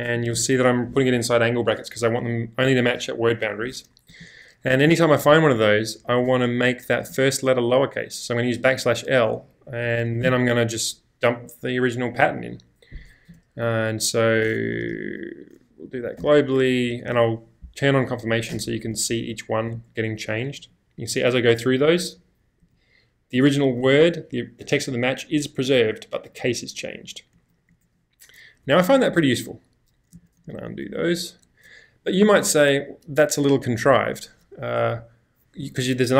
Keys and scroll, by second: 1.6 typing, 4.1 /, 6.0 \, 7.0 |, 9.6-10.7 typing, 13.3 /, 14.8 g, 16.2 c, 16.6 BackSpace, 17.0 c, 18.2 typing, 18.6 Return, 19.7-22.6 typing, 23.6 y, 25.7-30.7 typing, 32.4 u.